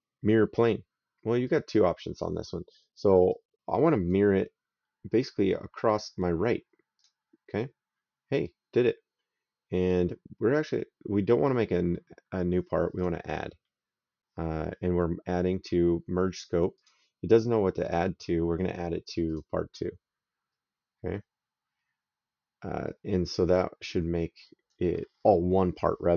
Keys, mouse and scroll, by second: 1.3 click, 3.1 right click, 6.8 click, 12.8 click, 16.6 click, 19.1 click, 22.7 right click.